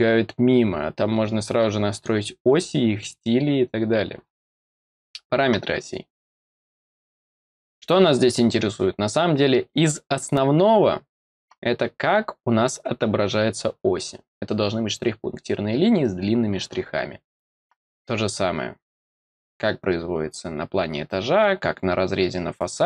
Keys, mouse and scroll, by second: 4.9 click, 17.2 click, 19.4 click.